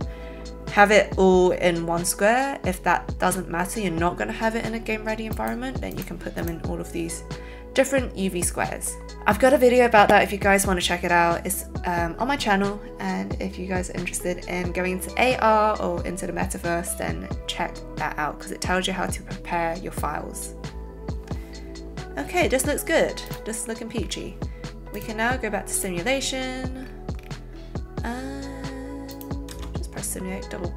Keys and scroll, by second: 29.6 space.